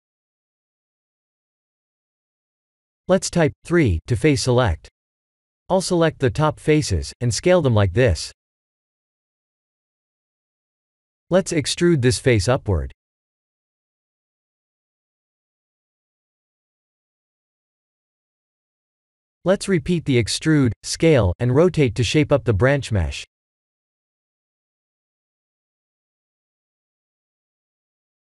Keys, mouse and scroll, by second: 2.0 3, 2.3 click, 2.9 shift+click, 3.6 shift+click, 4.5 shift+click, 5.0 shift+click, 5.5 shift+click, 6.2 s, 9.8 3, 10.1 click, 11.7 g, 14.0 ctrl+z, 14.8 e, 16.8 s, 17.8 e, 18.9 s, 20.6 KP_1, 22.7 middle click, 25.4 KP_1, 25.9-26.3 scroll down 2, 26.4 shift+middle click, 27.3 e, 27.9 g.